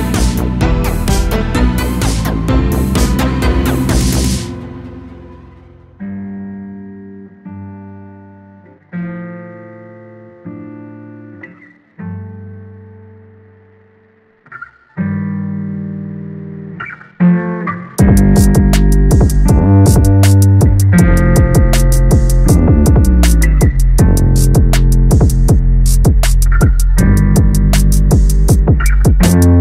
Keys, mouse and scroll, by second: 0.2 l, 0.8 g, 3.1 r, 4.2 s, 6.0 r, 6.7-7.0 scroll down 1, 7.0-8.1 shift+middle drag, 8.1-8.4 scroll down 1, 8.4-11.7 typing, 9.0 click, 9.8 click, 12.1 shift+middle click, 12.6-13.1 scroll up 1, 13.1 click, 13.6 g, 14.3 a, 14.5 a, 15.0-16.4 shift+middle drag, 16.4 click, 16.7 g, 17.3 a, 17.5 a, 17.9-19.2 shift+middle drag, 19.2 click, 19.6 alt+s, 20.8 a, 21.0 a, 21.8 click, 22.2 g, 23.9 Tab, 24.1 scroll down 3, 24.3 a, 24.4 a, 25.0-25.5 shift+middle drag, 25.5-26.3 scroll up 3, 26.3-29.6 shift+middle drag.